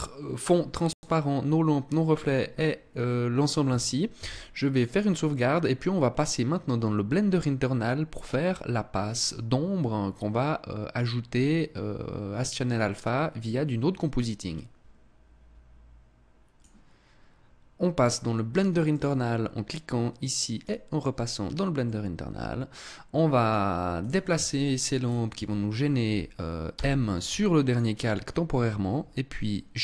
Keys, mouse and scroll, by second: 3.6 ctrl+s, 17.9 click, 18.3 click, 21.2 middle click, 23.3 right click, 23.9 shift+right click, 24.4 shift+right click, 26.1 m, 29.3 middle click.